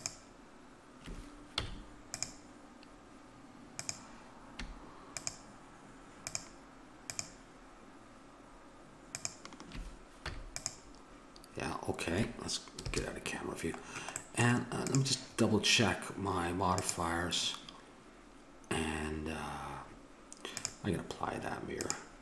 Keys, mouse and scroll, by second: 1.5 x, 4.0-5.9 right drag, 10.1 x, 12.8 KP_0, 14.7-16.0 right drag, 16.3 right click, 16.7-22.2 drag.